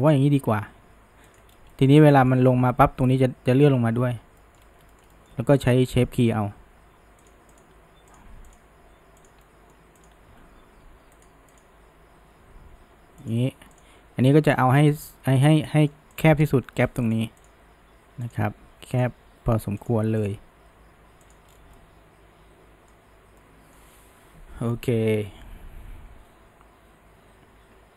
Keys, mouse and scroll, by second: 0.5 g, 1.7-4.6 middle drag, 4.9-5.6 shift+middle drag, 5.6 click, 6.6 g, 7.6 click, 7.8 g, 8.5 drag, 8.8 g, 9.5-10.0 middle drag, 10.0 click, 10.2 g, 11.6 click, 12.0 g, 13.8 click, 14.5 g, 15.7 middle click, 16.2 click, 16.6 g, 17.4 click, 17.8 g, 19.0 click, 19.2 g, 20.2 click, 20.7 g, 21.5 scroll, 21.8-26.6 middle drag.